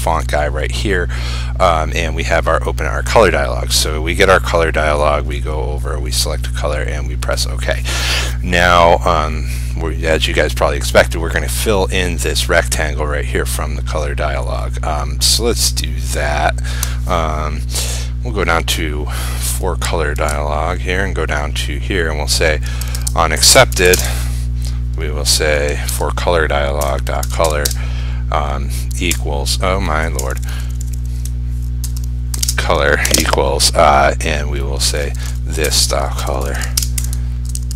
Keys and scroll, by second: 20.3 ctrl+c, 24.1 ctrl+space, 26.0 ctrl+v, 37.7 ctrl+s.